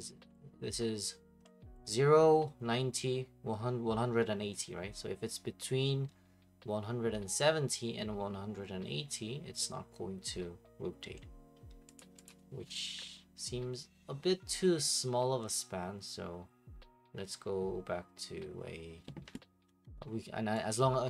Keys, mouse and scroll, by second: 1.4 middle click, 11.1 middle click, 12.0 middle click, 12.3 middle click, 12.3 click, 19.7 Escape, 20.7 click.